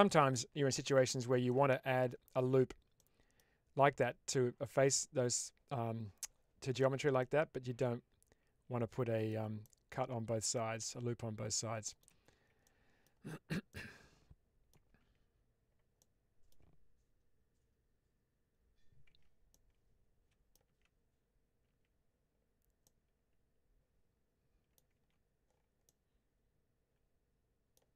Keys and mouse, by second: 0.7 click, 0.7 p, 1.4 middle click, 2.9 middle click, 7.1-9.2 middle drag, 9.5 shift+middle click, 10.4-11.4 middle drag, 11.7 shift+middle click, 12.5 middle click, 13.6-14.6 middle drag, 14.9 Tab, 15.9 middle click, 19.0 Tab, 19.4-20.4 middle drag, 20.5 Tab, 21.5 Tab, 22.7-24.6 middle drag, 24.8 Tab, 25.7-27.6 middle drag.